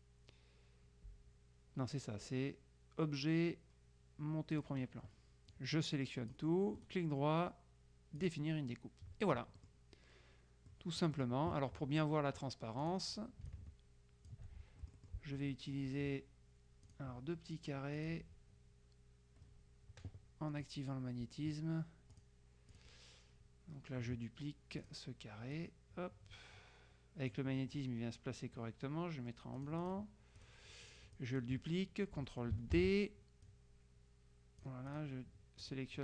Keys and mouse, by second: 4.6 click, 5.6-6.9 drag, 8.3 click, 9.7 middle click, 10.8 click, 11.4 right click, 12.9 click, 13.6-14.9 ctrl+shift+drag, 17.0 click, 18.1 click, 22.2 click, 24.9 click, 25.6-27.9 drag, 29.6-31.0 drag, 31.2 click, 32.8 ctrl+d, 33.6-35.6 drag, 35.8 click.